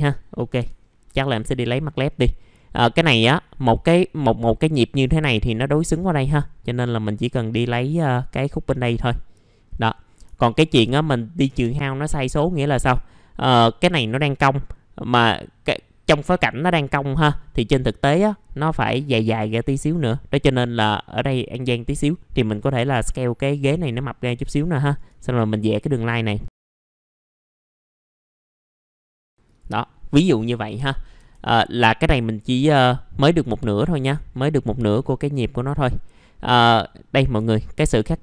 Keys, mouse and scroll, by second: 1.6-2.3 scroll up 1, 2.3 middle click, 9.3-9.9 scroll down 1, 9.9 middle click, 10.8 shift+click, 11.9-12.5 scroll up 1, 12.5 middle click, 12.9-17.1 scroll up 1, 17.1 r, 18.2-21.8 drag, 21.8-23.1 scroll down 1, 24.1-24.7 scroll up 1, 24.8 ctrl+right click, 25.6 click, 26.0 scroll up 1, 26.6 click, 30.4 right click, 35.7 scroll down 1, 36.0-36.5 scroll up 1, 36.5 click.